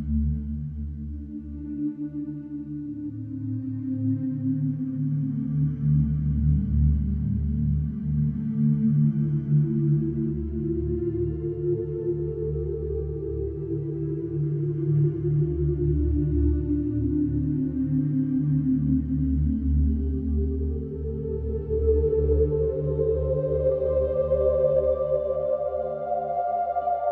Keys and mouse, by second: 0.1-1.3 ctrl+alt+drag, 1.8-3.0 drag, 4.6-11.9 ctrl+alt+drag, 12.5-21.4 alt+drag, 21.9-27.1 drag.